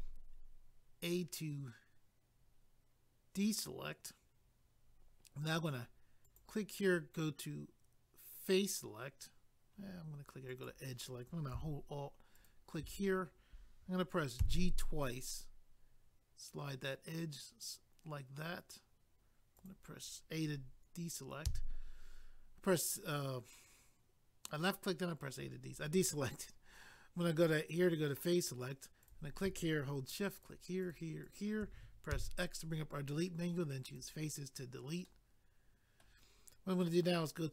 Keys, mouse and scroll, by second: 6.2 click, 10.5 click, 12.3 alt+click, 19.6 click, 21.5 a, 27.7 click, 27.8 click, 29.0 click, 29.1 click, 30.4 shift+click, 30.8 shift+click, 30.9 shift+click, 31.2 shift+click, 31.3 shift+double click, 32.1 x, 33.8 click, 34.0 click, 35.0 middle click.